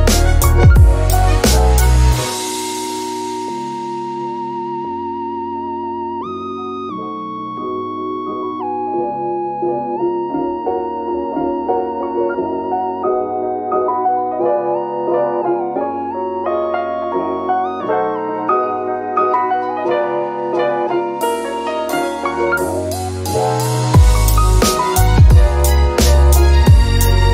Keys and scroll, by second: 4.3 l, 7.1 1, 12.0 e, 20.6-21.9 typing.